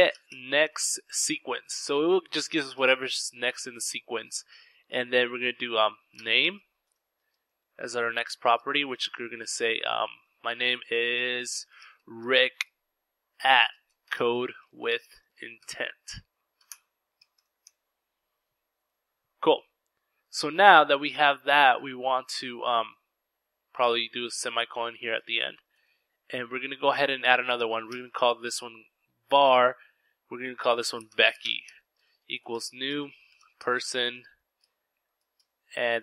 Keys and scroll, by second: 0.0-0.9 typing, 4.4-5.9 typing, 7.2-7.7 typing, 9.5-16.0 typing, 17.2 typing, 24.0 typing, 24.2 Return, 25.4-26.5 typing, 29.5-36.0 typing, 34.4 Left, 35.4 Return.